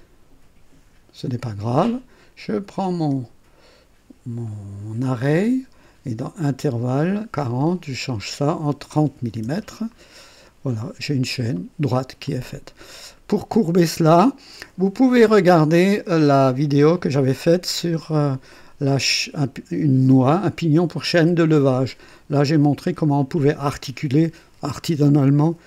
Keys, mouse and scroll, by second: 2.7-4.6 drag, 6.6 click, 8.0 click, 9.2 KP_3, 9.5 KP_0, 9.9 click, 10.7 scroll up 1, 11.5-12.2 right drag, 12.3-13.4 drag, 16.7 click.